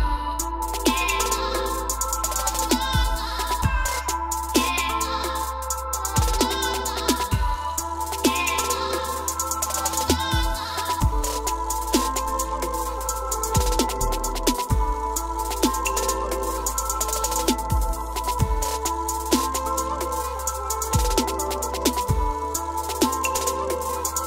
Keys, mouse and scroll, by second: 0.8 s, 2.1-3.2 drag, 4.6-5.6 drag, 5.6 o, 6.8 click, 6.9 s, 9.2 click, 10.8 click, 10.9 s, 12.4 scroll, 13.5 click, 15.0 click, 18.1 click, 18.7 click, 19.6 s, 20.5 click, 21.7 click, 21.8 o, 23.6 scroll, 23.9 click.